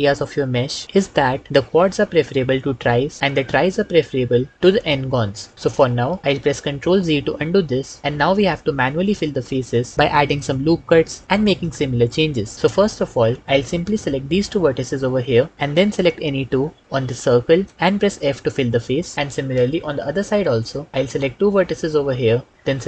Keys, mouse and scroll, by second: 5.7 ctrl+middle click, 7.5 ctrl+z, 18.0 f.